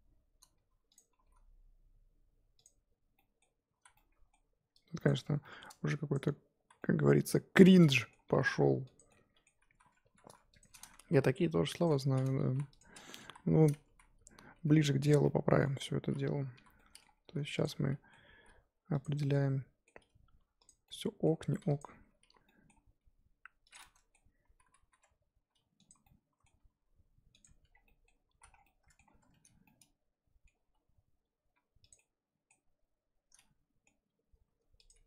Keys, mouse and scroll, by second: 1.1 s, 3.1 middle click, 3.8 z, 3.9-5.0 middle drag, 5.0 click, 5.4 middle click, 6.1 shift+click, 6.6 z, 6.8-8.3 middle drag, 8.3 g, 9.1 middle click, 9.7-10.0 scroll up 2, 10.0 3, 11.1 g, 12.4 g, 12.9-13.2 scroll down 3, 13.2 KP_1, 13.6-13.9 scroll up 1, 13.9 z, 15.1 z, 15.2-16.5 middle drag, 16.5 l, 16.8 middle click, 17.2 r, 17.6 middle click, 18.3 g, 19.2 middle click, 20.0 g, 20.8 middle click, 21.8 click, 22.2 l, 22.4 middle click, 22.8 g, 23.8 middle click, 24.7 r, 26.1 middle click, 26.6 s, 27.5 Tab, 27.7 scroll down 3, 27.8 middle click, 28.4 z, 28.5 scroll down 3, 28.6 middle click, 29.0-29.6 scroll up 6, 29.2 Tab, 29.6 middle click, 30.5 scroll down 1, 30.6 g, 31.9-34.9 middle drag, 34.9 click.